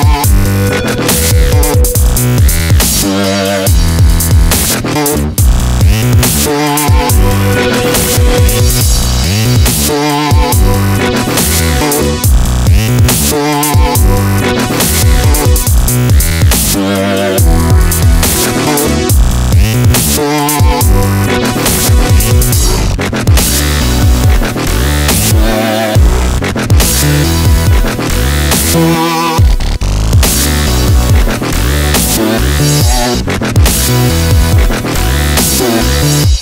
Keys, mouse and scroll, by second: 0.6 ctrl+b, 3.0 a, 3.9-5.6 right drag, 4.5 ctrl+b, 6.3 right click, 7.2 ctrl+b, 8.9 a, 9.4-10.6 middle drag, 11.1 middle click, 12.1-14.1 right drag, 12.7-14.6 drag, 14.8-16.2 middle drag, 16.8 click, 18.5 middle click, 19.0 ctrl+z, 19.1-20.1 ctrl+z, 20.2-20.9 ctrl+z, 21.9-24.1 drag, 22.3-23.6 right drag, 25.0-26.0 middle drag, 26.8 click, 27.3 middle click, 28.2 ctrl+b, 30.6-31.6 right drag, 31.6-33.1 drag, 32.1-33.7 right drag, 33.1 ctrl+b, 34.7 a, 35.4-36.4 right drag, 35.9 ctrl+b.